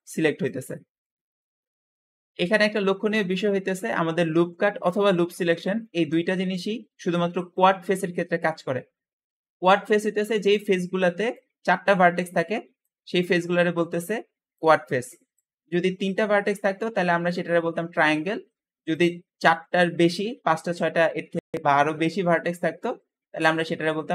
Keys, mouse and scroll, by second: 0.9 Escape, 1.5-2.8 scroll up 1, 2.8-3.6 scroll up 1, 3.6-5.7 drag, 5.7-8.1 middle drag, 8.1-8.8 scroll up 1, 8.8-9.7 scroll up 1, 9.7-11.6 scroll up 1, 9.7 `, 11.6-12.8 scroll up 1, 12.8-24.0 scroll up 1, 24.0 Escape.